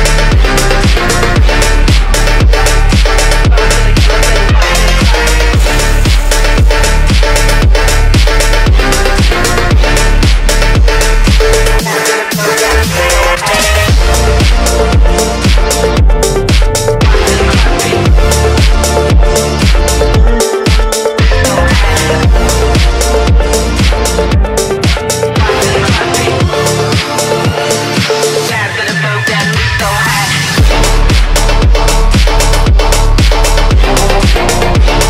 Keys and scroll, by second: 2.9 ctrl+z, 3.9 F3, 4.0 Escape, 4.1 F3, 4.2 Escape, 6.7 F3, 6.8 Escape, 13.9 F3, 14.0 Escape, 32.3 shift+F2, 32.5 Escape.